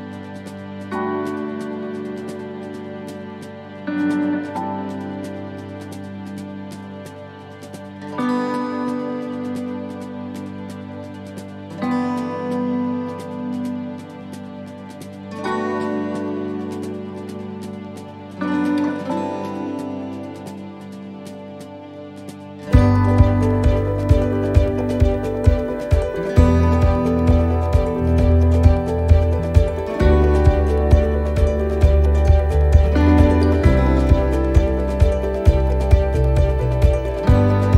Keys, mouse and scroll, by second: 1.3 c, 4.1 right click, 5.0 click, 6.5 right click, 7.4 click, 8.8 right click, 9.6 click, 11.2 alt+shift+right click, 15.2 shift+middle click, 16.9 alt+shift+right click, 19.6 c, 21.9 middle click, 22.9 shift+middle click, 23.2-23.7 scroll up 4, 23.6 middle click, 25.2 alt+shift+right click, 26.1 ctrl+z, 26.6 alt+shift+right click, 31.0 right click, 32.2 click, 33.8 shift+middle click, 35.5 right click, 36.5 click.